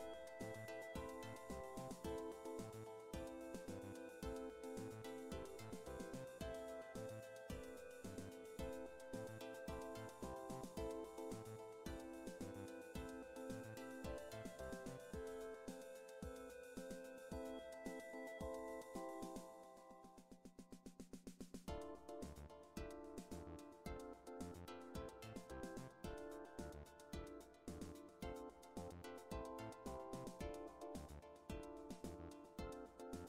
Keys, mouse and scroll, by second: 3.1-3.4 scroll down 2, 8.5-9.0 scroll up 2, 9.0-9.5 scroll down 2, 10.7 click, 15.3 click, 20.4 shift+click, 21.8 Delete, 30.1 ctrl+z.